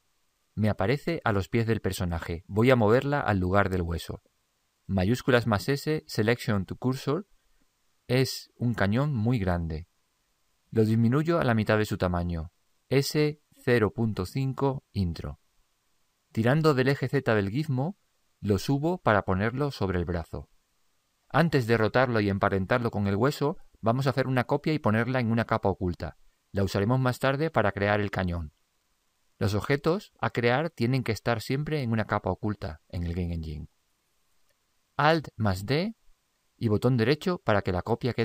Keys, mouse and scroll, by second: 0.0 click, 13.1 s, 17.6 click, 35.8 alt+d.